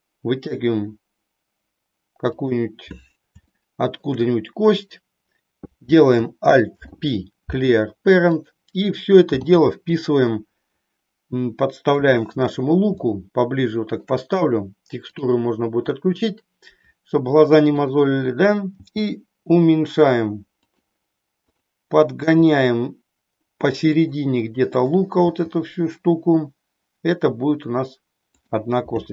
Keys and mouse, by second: 3.6 shift+middle click, 4.9 click, 6.6 alt+p, 9.5 g, 12.0 click, 13.1-14.1 shift+middle drag, 15.3 click, 17.6 click, 18.8 g, 20.6 click, 22.3 g, 24.0 click, 24.6 click, 25.4 g, 28.3 click.